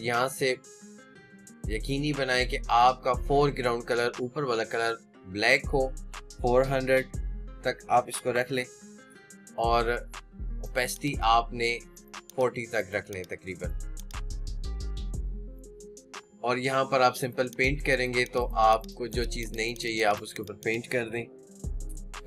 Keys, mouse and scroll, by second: 16.4-18.2 drag.